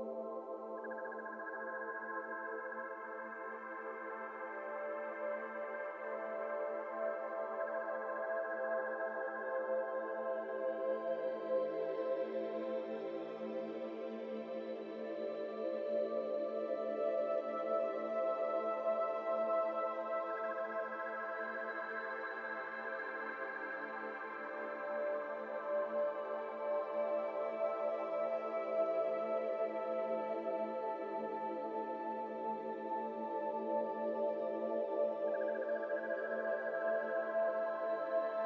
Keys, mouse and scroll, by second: 0.2 c, 1.7 alt+z, 1.9 middle click, 2.6-3.0 scroll up 1, 3.0 s, 4.4 middle click, 4.8 ctrl+b, 7.0-8.8 middle drag, 9.0 middle click, 9.3 Tab, 9.8 ctrl+r, 12.4 ctrl+r, 14.4 middle click, 14.7 Tab, 14.8 scroll down 1, 14.9-15.4 middle drag, 15.4 Tab, 15.5-18.0 middle drag, 19.4-21.0 middle drag, 21.0 ., 22.0 s, 23.0 s, 26.1 middle click, 27.1 scroll down 2, 27.2 middle click, 27.7 ctrl+r, 29.6 ctrl+r, 30.9 ctrl+z, 31.1 ctrl+z, 31.6 middle click, 31.8 scroll up 2, 32.0 s, 33.4 ., 33.9-35.6 middle drag, 35.6 ctrl+r, 37.7 ctrl+r.